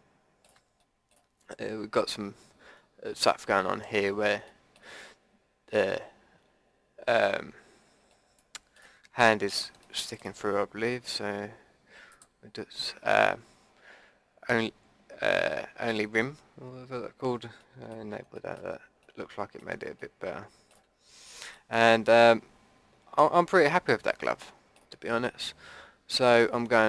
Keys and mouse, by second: 12.1-16.6 drag, 17.6-19.0 drag, 19.2 click, 19.5-20.6 middle drag, 21.7 middle click, 23.2 middle click.